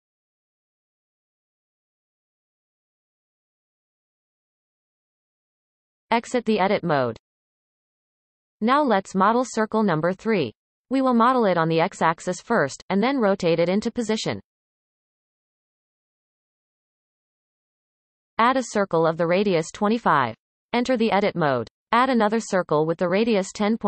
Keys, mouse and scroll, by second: 1.9 shift+click, 2.8 f, 4.5-5.5 scroll down 7, 5.5-6.2 shift+middle drag, 6.2 Tab, 6.8-9.8 shift+middle drag, 10.0-13.1 shift+middle drag, 14.9-18.0 shift+middle drag, 18.6 shift+a, 23.2-23.8 drag.